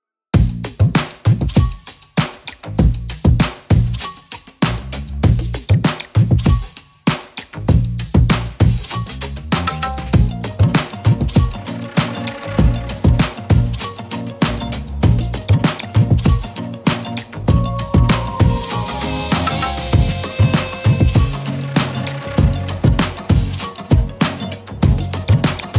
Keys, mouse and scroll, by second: 0.5 ctrl+z, 0.6 ctrl+z, 0.8-1.5 middle drag, 1.8 click, 1.9 middle click, 2.2-6.8 typing, 3.5 click, 4.3 click, 5.0 shift+click, 6.3 shift+click, 8.0 click, 8.2-11.7 typing, 8.6 click, 9.1 click, 9.6 click, 10.7 click, 11.4 click, 12.8 click, 13.3 Tab, 13.4 scroll down 2, 13.5 middle click, 14.5 scroll down 3, 14.6 middle click, 15.3 click, 15.7 scroll down 6, 15.9-16.6 middle drag, 17.5-18.9 drag, 19.0 middle click, 19.2-19.6 scroll up 9, 19.6-21.1 drag, 21.1-21.9 scroll down 18, 22.1-23.4 drag, 23.7-24.8 drag, 24.8 middle click, 25.2-25.7 scroll up 4, 25.3 shift+middle click.